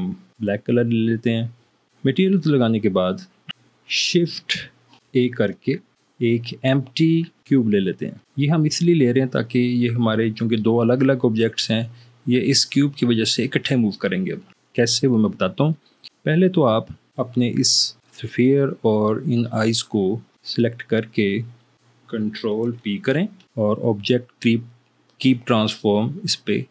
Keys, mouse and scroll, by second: 5.3 shift+a, 23.6 ctrl+p.